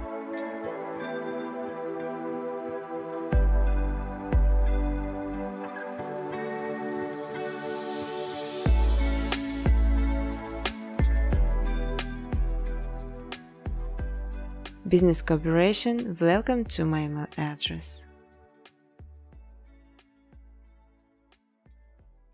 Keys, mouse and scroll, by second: 0.5 click, 1.1 right click, 2.7 click, 3.8 click, 4.1-5.4 typing, 7.0 click, 7.2 click, 9.3 click, 9.9-11.3 typing, 11.1 click, 14.4 space, 14.5 space, 15.9 space, 16.2 space, 17.9 space, 18.1 space, 20.1-22.1 typing.